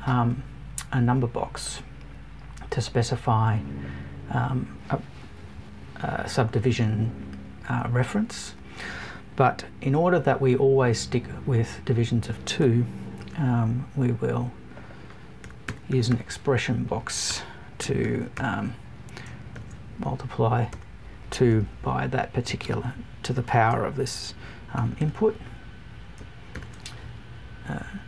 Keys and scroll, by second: 5.4 Up.